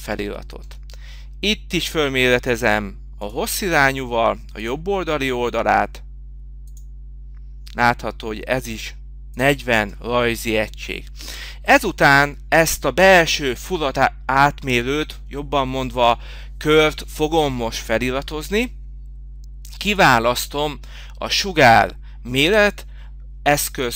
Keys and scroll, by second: 9.9 Escape.